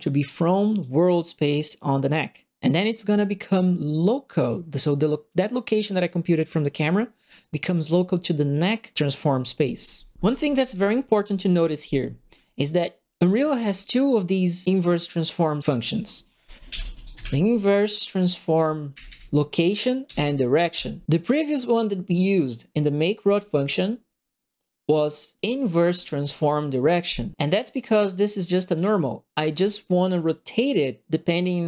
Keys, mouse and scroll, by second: 0.2 click, 3.7 click, 4.4 click, 5.5 right click, 6.0 click, 6.7 click, 7.1 right click, 12.4 right click, 14.6 click, 15.1 click, 15.6 right click, 16.4-17.7 typing, 18.9 Up, 19.0 Up, 20.0 Up, 20.7 Return, 21.0 click, 22.0 click, 24.4 click, 28.0 click, 29.3 click.